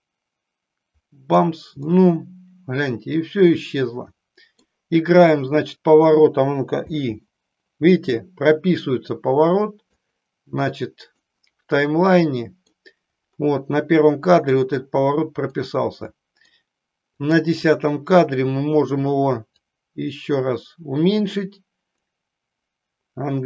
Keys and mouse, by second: 1.8-4.8 middle drag, 10.2 click, 12.0 middle click, 14.5-15.7 middle drag, 16.2 middle click, 17.3 click, 19.5-22.2 drag.